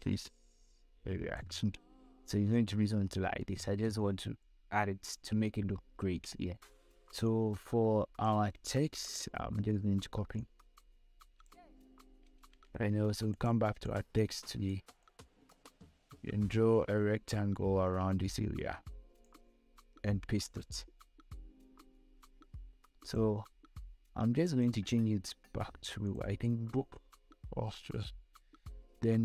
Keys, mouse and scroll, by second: 2.1-2.8 scroll down 2, 5.9 scroll down 1, 6.7 scroll up 1, 7.5 space, 7.7 click, 8.0 space, 9.4-13.0 drag, 12.6 ctrl+c, 13.7-20.5 drag, 20.5 ctrl+v, 23.3 click.